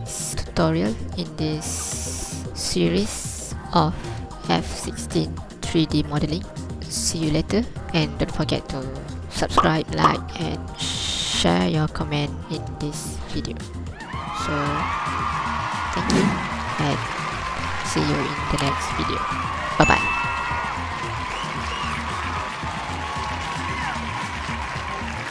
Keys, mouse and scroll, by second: 10.4-12.4 scroll down 1, 12.4-16.1 scroll down 1.